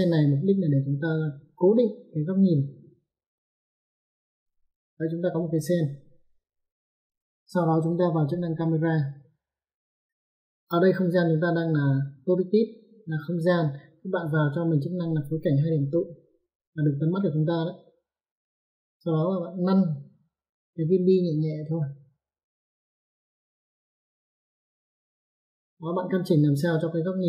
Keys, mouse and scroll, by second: 3.9 click, 9.5 click, 18.1 click, 24.5 click.